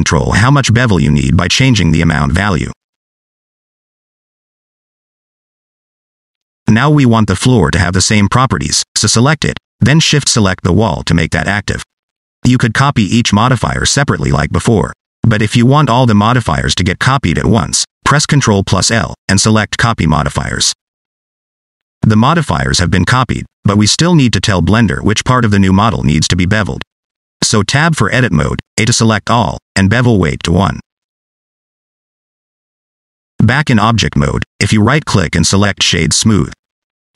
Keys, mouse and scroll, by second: 1.4 click, 2.1 middle click, 2.5 shift+middle click, 2.8 middle click, 3.4 shift+click, 7.0 scroll down 2, 7.1 shift+middle click, 7.4 middle click, 9.1 click, 11.4 shift+click, 12.9 click, 14.4 click, 17.4 ctrl+l, 21.2 click, 24.0 shift+middle click, 24.3 middle click, 26.3 Tab, 28.0 a, 30.5 click, 33.5 Tab, 34.5 middle click, 35.2 scroll down 1, 35.2 middle click, 35.9 scroll up 2, 36.0 middle click, 36.4 right click.